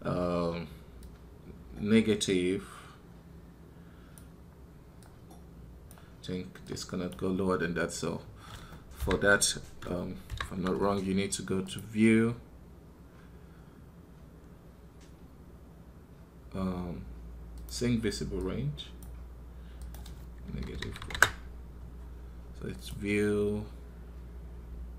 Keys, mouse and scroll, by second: 8.8-24.9 drag.